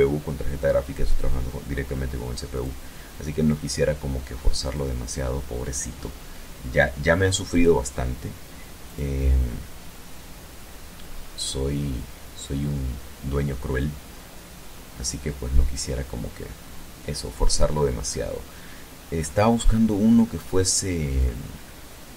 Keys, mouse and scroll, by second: 1.5 click, 3.6 click, 6.4 click, 7.8 click, 10.1-11.9 scroll down 3, 12.3-15.9 scroll down 11, 16.7 scroll down 2, 17.0-19.7 scroll up 8, 20.0-20.9 scroll up 3, 21.2-21.9 scroll up 2.